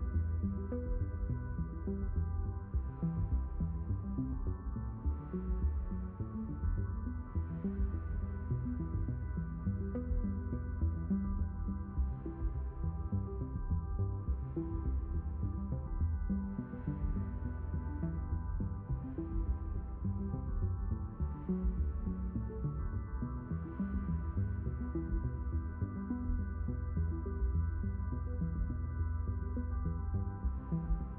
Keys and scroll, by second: 25.7 BackSpace.